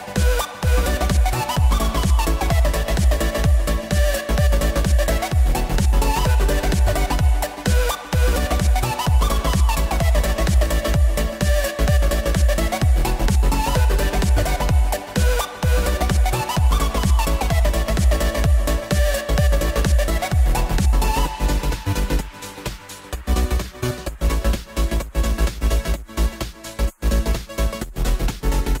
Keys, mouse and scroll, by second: 0.5-1.5 middle drag, 1.5 click, 1.7 s, 3.0 KP_3, 4.0-5.1 scroll up 2, 5.1 click, 6.0 click, 6.1 x, 7.0 click, 7.2 s, 8.4 click, 10.7 s, 11.9-13.0 drag, 13.0 shift+d, 16.5 click, 16.7 scroll down 1, 16.9-18.9 middle drag, 18.9 click, 19.8-22.8 middle drag, 25.0-25.5 drag, 25.5-25.9 scroll up 4, 25.9-27.1 middle drag, 27.1 click, 27.9 drag, 28.5-28.8 drag.